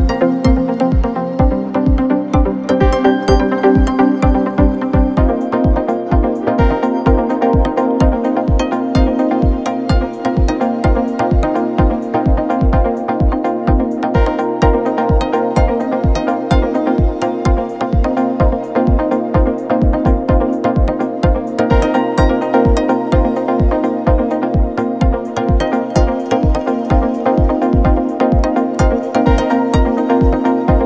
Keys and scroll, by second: 15.2 z, 16.1 space, 19.8 F9.